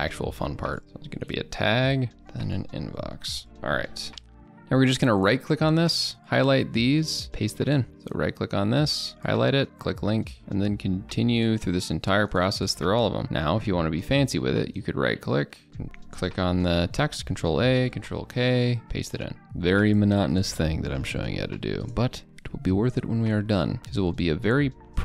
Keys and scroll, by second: 7.3 ctrl+v, 9.6 ctrl+v, 13.2 ctrl+v, 15.8 ctrl+a, 17.3 ctrl+a, 17.7 ctrl+k, 18.7 ctrl+v, 20.7 ctrl+a, 21.0 ctrl+k, 21.4 ctrl+v, 23.8 ctrl+a, 24.1 ctrl+k, 24.4 ctrl+v.